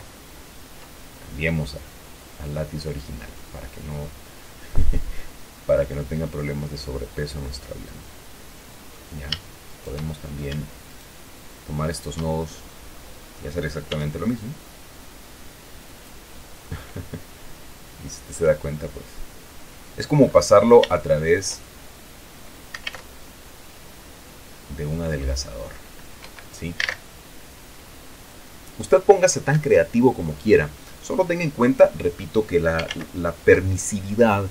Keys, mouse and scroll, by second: 0.2 ctrl+z, 2.0-3.8 drag, 4.3-4.8 scroll up 2, 4.8-5.6 scroll down 2, 6.2-9.5 drag, 10.0 shift+right click, 10.4-10.8 shift+scroll up 1, 11.2 shift+right click, 12.2 shift+right click, 12.7-13.0 shift+scroll down 3, 13.0 click, 14.3 s, 16.3 click, 17.0-20.0 drag, 20.1-20.9 scroll down 2, 20.9-21.3 scroll up 3, 21.3-23.5 shift+middle drag, 23.2 alt+a, 26.5 Escape, 27.1 alt+a, 29.8 Escape, 30.8-31.3 scroll down 2, 31.3-32.4 drag, 32.4 middle click, 33.3 ctrl+z.